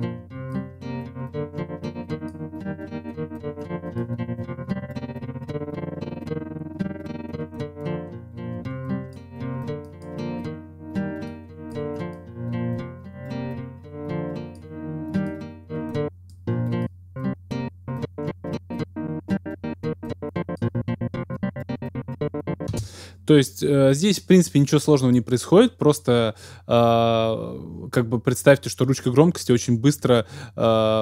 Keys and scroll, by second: 22.7 space.